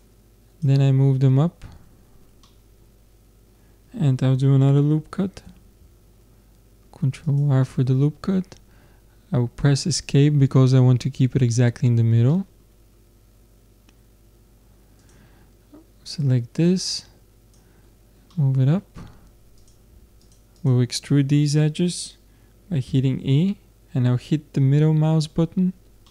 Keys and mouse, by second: 2.5-4.3 middle drag, 5.5 ctrl+r, 12.3-15.0 middle drag, 15.0-18.2 drag, 19.6-22.5 drag, 19.6 middle click, 22.9 e.